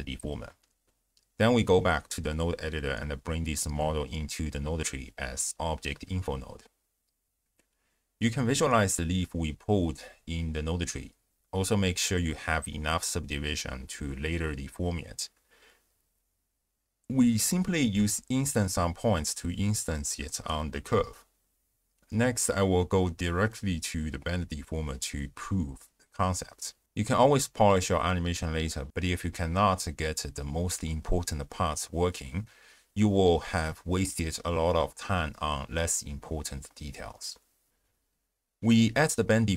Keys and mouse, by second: 1.3-2.0 drag, 2.8-3.3 drag, 3.7 drag, 4.0 click, 5.6 click, 8.1 ctrl+alt+shift+q, 10.7-11.6 drag, 11.9-12.3 shift+drag, 12.6 z, 13.6 ctrl+a, 14.8-16.0 drag, 16.3 g, 17.0 click, 17.6 ctrl+a, 18.4-18.9 drag, 19.9 shift+drag, 20.4 z, 21.1 click, 21.4 z, 26.0 click, 26.9 click, 27.9 click, 28.4 ctrl+a, 31.2 click, 32.0 click, 38.1 click.